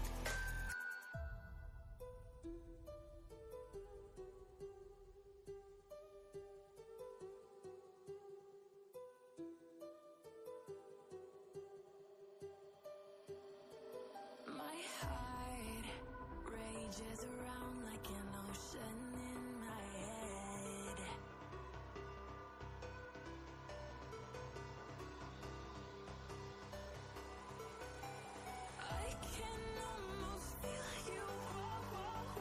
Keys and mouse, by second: 1.7 ctrl+space, 1.7-2.3 ctrl+click, 2.2 ctrl+space, 3.1 click, 4.9 ctrl+z, 6.4 click, 12.1 click, 13.4 click, 15.3 ctrl+space, 15.4-16.0 ctrl+click, 15.8 ctrl+space, 16.4-16.8 click, 16.8 space, 17.8 ctrl+z, 18.5-21.5 drag, 27.1 ctrl+space, 27.3 ctrl+click, 27.6-28.3 ctrl+space, 28.8 click.